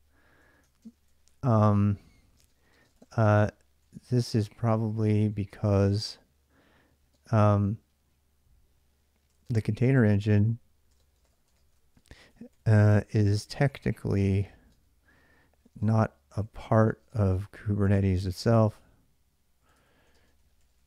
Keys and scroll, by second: 0.0-6.9 typing, 8.8-20.8 typing.